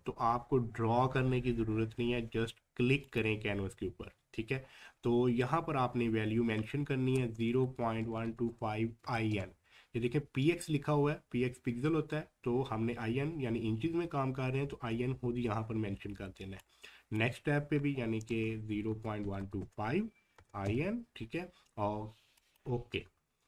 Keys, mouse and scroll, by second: 3.0 click, 9.0 click, 11.0-11.8 typing, 16.9-19.4 drag, 20.4 typing, 22.4 click.